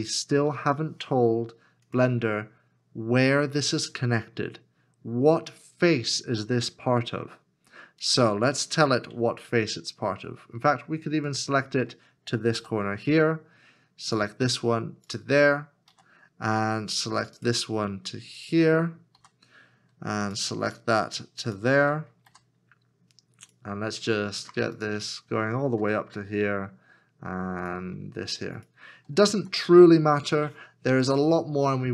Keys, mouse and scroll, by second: 0.4 ctrl+z, 11.3 shift+click, 12.6 f, 15.1 shift+click, 15.9 f, 18.4 shift+click, 21.4 shift+click, 22.3 f, 24.8 shift+click, 28.6 shift+click, 29.5 f.